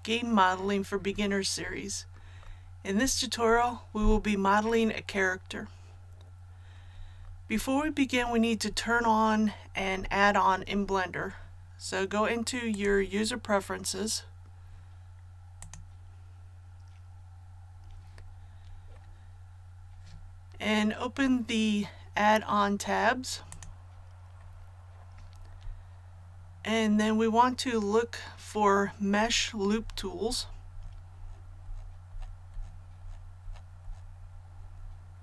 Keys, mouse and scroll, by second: 29.1 scroll down 1, 31.3-31.7 scroll down 1, 33.4-33.8 scroll down 1.